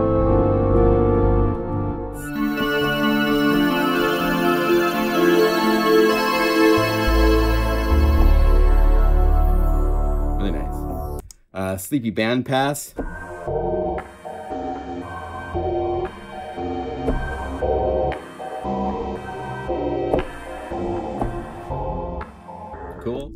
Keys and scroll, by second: 0.2 F4, 0.7 F4, 3.4 F3, 3.9 F4, 4.1 F3, 4.6 F4, 12.9 F1, 12.9 F2, 12.9 F3.